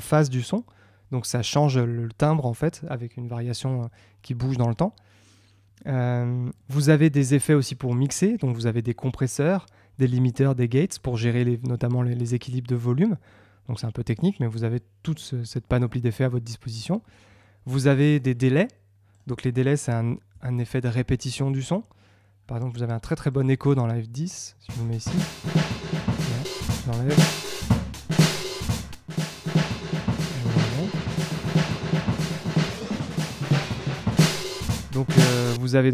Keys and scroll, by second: 35.7 space.